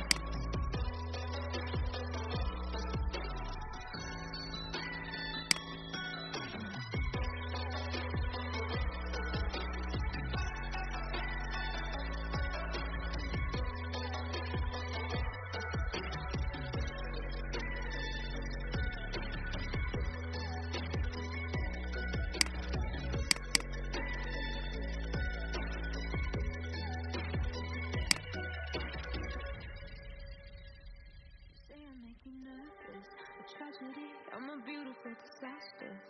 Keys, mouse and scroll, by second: 0.0-2.2 drag, 5.3 space, 6.3 click, 12.1-12.5 alt+scroll down 1, 16.1-18.2 alt+scroll down 1, 18.2-19.9 scroll down 1, 22.4 click, 28.9-29.2 alt+scroll down 1, 32.4-32.7 scroll down 1.